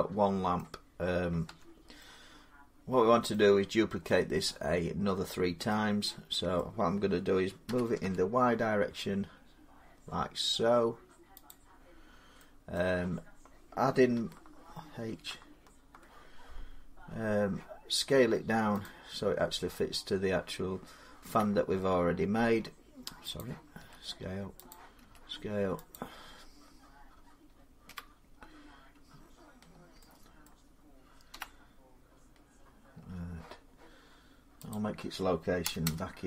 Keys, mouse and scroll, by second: 0.4 middle click, 1.3 Tab, 3.1-4.8 middle click, 3.1 scroll up 1, 3.3-3.6 scroll, 5.5 middle click, 6.5 middle click, 7.5-7.8 typing, 9.7 scroll, 11.3 click, 11.8 scroll, 11.8-12.2 scroll down 4, 12.4 scroll up 4, 12.6 middle click, 14.8 alt+h, 16.4-16.7 scroll up 4, 16.8 scroll down 6, 16.9 middle click, 16.9 scroll, 18.7 click, 19.2-19.8 scroll, 21.1 s, 23.2 click, 23.7 s, 24.5 click, 24.8 s, 25.8 click, 27.7 1, 29.4-29.8 scroll down 3, 30.3 middle click, 31.4-32.7 scroll up 3, 31.4 ., 32.7 scroll down 4, 34.5 click, 35.5 0, 35.7 Return.